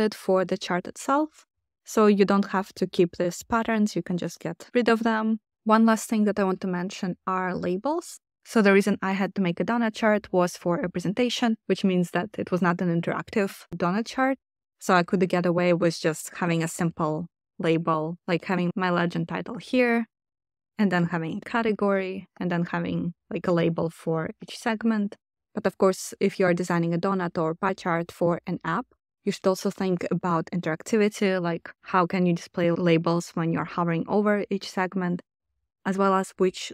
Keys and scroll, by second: 4.2 BackSpace, 4.8 BackSpace, 16.0-19.1 typing, 20.4-21.8 typing, 25.0 space, 25.1 2.